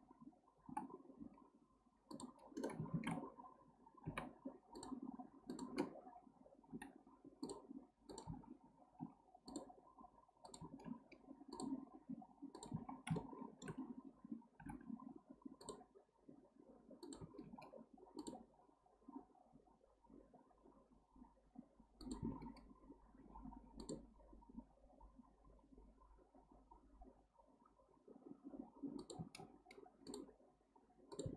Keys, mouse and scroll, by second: 0.7 k, 2.9 ctrl+z, 4.1 k, 6.7 k, 10.8 k, 13.2-14.6 shift+middle drag, 14.6 k, 17.4 k.